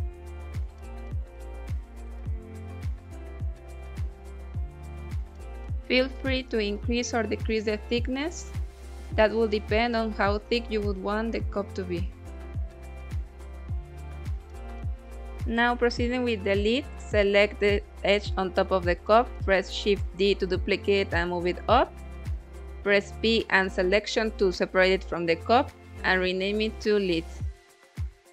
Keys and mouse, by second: 0.4 ctrl+r, 3.6 click, 4.3 middle click, 5.4 middle click, 6.4 middle click, 7.3 Tab, 7.8 click, 9.3 click, 10.0 click, 10.2 KP_1, 11.5 s, 14.2 click, 15.4 Tab, 16.4 2, 16.9 click, 17.1 click, 18.9 shift+d, 19.8 z, 21.4 click, 22.6 p, 24.7 Tab, 25.6-25.9 drag, 27.9 click.